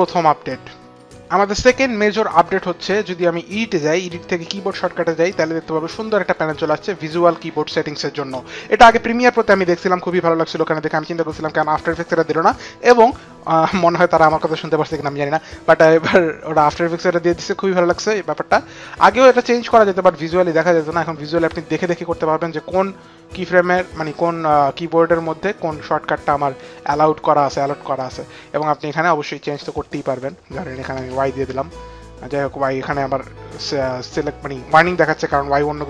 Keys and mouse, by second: 3.6 click, 4.8 click, 6.3 click, 31.0 click, 31.0 y.